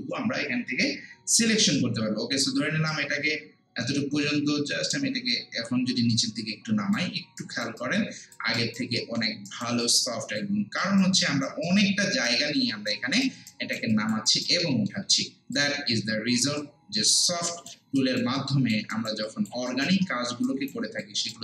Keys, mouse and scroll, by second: 4.9-7.4 drag, 7.4 alt+right click, 7.8 alt+click, 8.6 alt+right click, 9.0 alt+middle click, 9.5 alt+right click, 9.8 alt+click, 10.8 alt+right click, 11.2 alt+click, 11.7 alt+right click, 12.5 alt+middle click, 12.9 alt+right click, 13.9 alt+click, 14.3 alt+right click, 14.6 alt+middle click, 15.6 click, 18.0 alt+right click, 18.4 alt+click, 18.9 alt+right click, 19.3 alt+click, 19.7 alt+right click, 20.1 alt+middle click, 20.5 alt+right click, 21.0 alt+click.